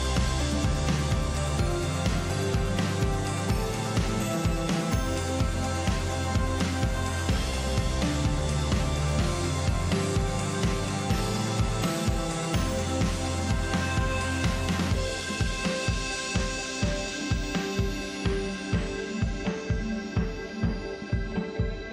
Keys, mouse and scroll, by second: 0.6 click, 1.5 click, 4.7-5.8 scroll down 4, 5.8-7.4 drag, 7.9-10.3 drag, 12.8-16.0 drag, 17.1-19.8 drag, 20.7-21.9 drag.